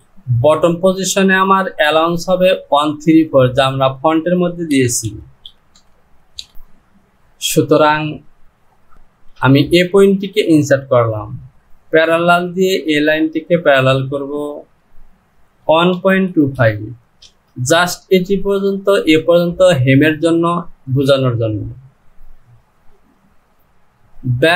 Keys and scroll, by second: 3.5 Down, 6.4 KP_1.